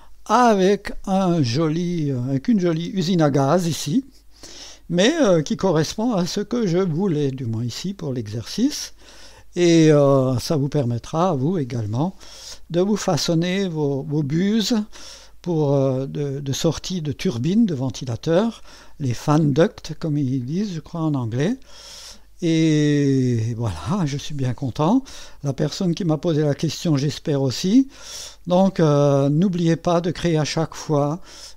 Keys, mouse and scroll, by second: 1.7 click, 2.7 space, 3.8-7.0 drag, 7.4-9.8 drag, 10.8-12.7 drag, 13.4-16.3 drag, 17.5-18.8 drag, 20.5-23.0 drag, 25.4-28.6 drag.